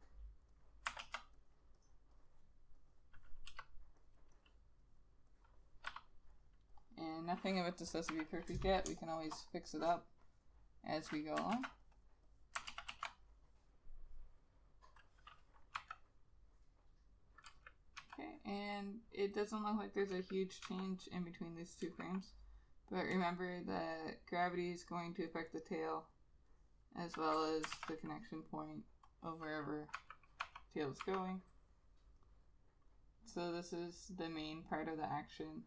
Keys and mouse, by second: 1.0 b, 1.1 ctrl+z, 2.3 double click, 3.6 e, 4.5 double click, 6.1 b, 6.9 double click, 8.6 ], 9.0 space, 11.7 ctrl+z, 12.8 ctrl+z, 13.0 ctrl+z, 16.0 ], 17.6 [, 18.1 ], 20.2 [, 20.8 ], 22.0 [, 23.2 ], 25.5 double click, 27.9 ctrl+z, 30.1 [, 30.5 ], 31.1 ].